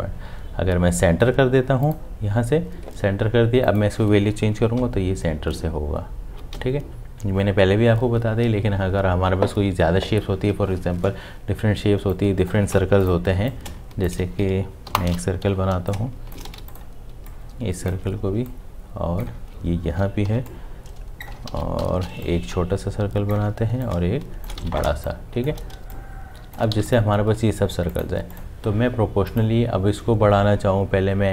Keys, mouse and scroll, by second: 4.8 Up, 6.5 Down, 13.2 m, 15.4 l, 16.4 shift+v, 17.1 shift+v, 18.2 alt+click, 21.4 m, 21.5 ctrl+z, 22.6 shift+click, 25.9 space, 28.4 v.